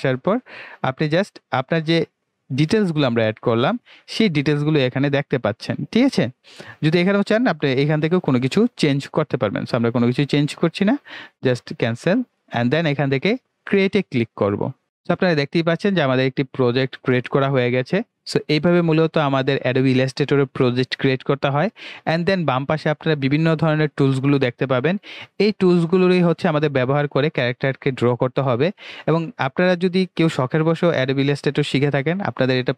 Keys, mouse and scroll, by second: 11.8 click, 14.5 click.